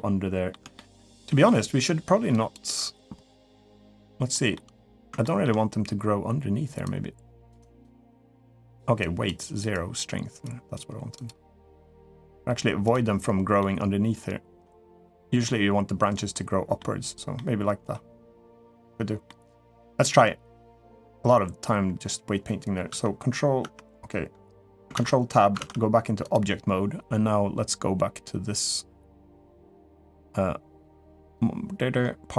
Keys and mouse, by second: 0.5 shift+middle click, 0.9 middle click, 2.1 ctrl+click, 3.7 click, 4.3 middle click, 5.0 shift+middle click, 6.6 click, 7.4 click, 8.8 click, 9.5 click, 10.2 click, 10.9 click, 12.6 click, 13.4-14.4 middle drag, 14.9 click, 15.2 middle click, 16.1 middle click, 17.1 middle click, 19.0 middle click, 22.7 Tab, 23.4 Tab, 24.8 ctrl+Tab, 25.6 ctrl+Tab, 31.1 click.